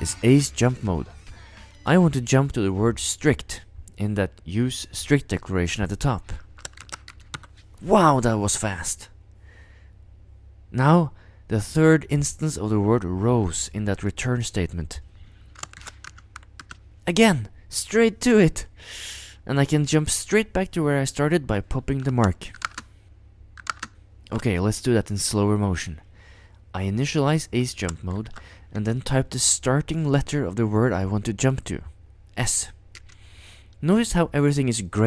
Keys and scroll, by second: 0.1 Return, 6.8 ctrl+0, 7.1 typing, 15.8 ctrl+0, 16.0-17.1 typing, 22.5 ctrl+u, 22.6 ctrl+space, 23.6 ctrl+u, 23.7 ctrl+space, 28.1 ctrl+0, 33.0 s.